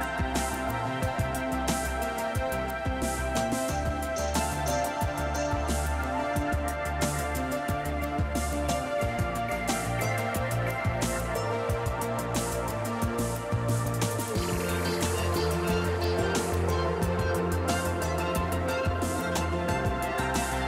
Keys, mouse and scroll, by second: 0.3 shift+click, 1.0 shift+click, 2.9 click, 5.0 click, 8.9 click, 10.5 click, 12.5 click, 13.9 click, 17.6 click, 19.6-19.9 scroll down 1.